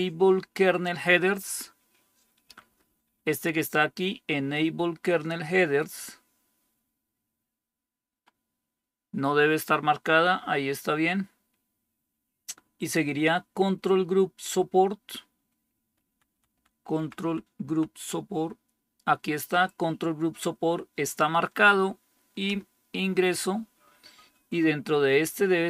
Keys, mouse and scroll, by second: 2.3 Down, 2.7 Down, 2.9 Down, 16.0 Down, 16.4 Down, 16.6 Down, 16.8 Down, 17.1 Down, 17.5 Down, 22.4 Return.